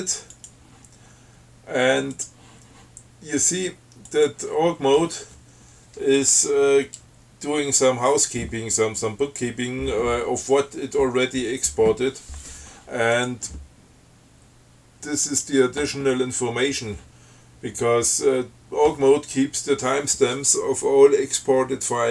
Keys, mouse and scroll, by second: 0.6 click, 2.4 click, 4.3 click, 13.4 click, 15.5 click.